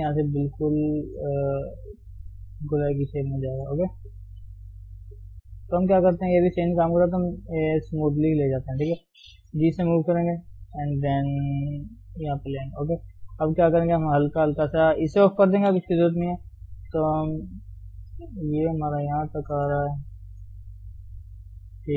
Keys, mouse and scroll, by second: 7.8 click, 8.2-8.5 scroll up 1, 8.5-9.8 shift+middle drag, 9.8 g, 12.5 scroll down 2, 12.7 shift+middle click, 12.9-14.4 scroll up 1, 14.4 click, 15.6 o, 16.3 g, 18.8 click, 19.0 g, 19.9 click, 20.1 g, 21.1 click, 21.3 g, 21.6 scroll down 2, 21.8 shift+middle click.